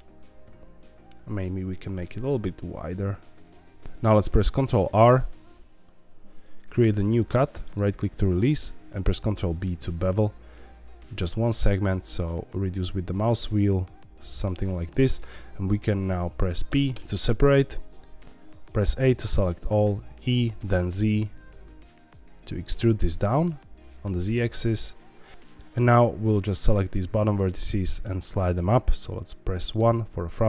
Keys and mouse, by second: 1.2 a, 1.5 s, 1.7 y, 3.8 Escape, 3.8 ctrl+z, 4.8 ctrl+r, 9.1 ctrl+b, 14.8 click, 16.6 p, 18.8 a, 19.2 middle click, 19.8 e, 20.5 z, 23.2 z, 24.8 click, 25.3 ctrl+z, 26.2 click, 27.3 shift+click, 27.6 middle click, 29.7 KP_1.